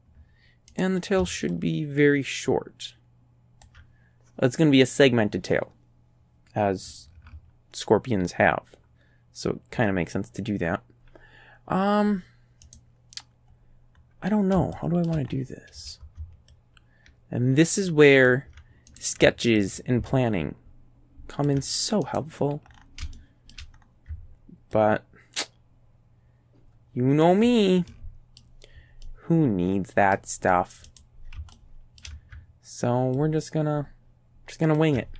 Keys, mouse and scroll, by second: 0.8 right click, 1.6-3.8 ctrl+drag, 12.7 right click, 13.5 middle click, 14.0 middle click, 14.8 shift+right click, 16.6-18.5 ctrl+drag, 18.9 ctrl+right click, 19.6-21.7 ctrl+drag, 22.1 right click, 22.8 scroll up 1, 23.2 shift+click, 23.8 shift+scroll up 1, 24.8-27.4 ctrl+drag, 27.9 ctrl+click, 29.1-30.4 middle drag, 30.9 right click, 31.6 shift+middle click, 33.2-35.0 ctrl+drag.